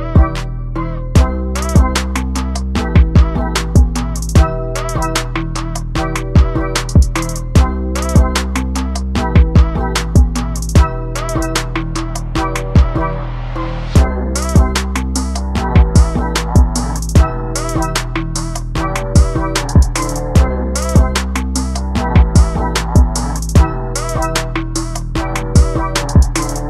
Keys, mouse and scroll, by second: 2.5 scroll up 1, 2.6 middle click, 2.8 scroll down 1, 2.9 scroll up 1, 2.9 Tab, 3.0 alt+a, 3.4 click, 3.5-3.9 scroll down 2, 3.6 middle click, 3.9 shift+middle click, 4.0 scroll up 1, 4.1 middle click, 4.4 scroll down 1, 4.5 shift+middle click, 4.6 scroll up 1, 5.2 click, 6.1 scroll down 3, 6.2 shift+middle click, 6.3 alt+a, 6.4 scroll up 2, 6.4-7.0 middle drag, 7.1 scroll up 1, 7.2 alt+a, 7.3 shift+middle drag, 7.5 drag, 8.3 scroll down 3, 8.5 alt+a, 8.6 shift+middle click, 8.7 scroll up 2, 10.3 z, 10.4-10.7 drag, 10.7 z, 11.0 scroll up 2, 11.4 click, 12.0 click, 12.1 scroll down 2, 12.4 shift+middle click, 12.5-13.0 scroll up 5, 12.8 middle click, 13.0 click, 14.4-15.6 drag, 15.9-17.3 drag, 17.3 shift+d, 17.7 click, 19.3 ctrl+space, 19.5 scroll down 1, 19.6 scroll up 2, 19.7 middle click, 19.9 scroll down 1, 20.0 middle click, 20.8 drag, 21.2 scroll up 3, 21.3 middle click, 21.7 click, 22.8-24.3 drag, 24.4 scroll down 1, 24.5 alt+a, 24.7-25.4 middle drag, 24.9 scroll down 1, 25.4 z, 25.6 click, 25.7 ctrl+space, 26.5 click.